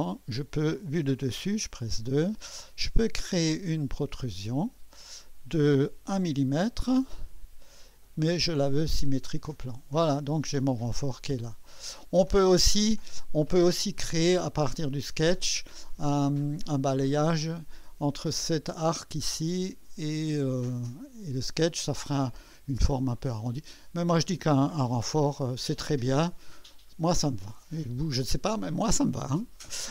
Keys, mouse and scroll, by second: 1.0 2, 3.9 click, 3.9 typing, 6.0 typing, 8.5 click, 11.7 click, 12.8-13.7 drag, 15.7-16.5 drag, 17.3 click, 23.5-24.6 drag, 25.1 1.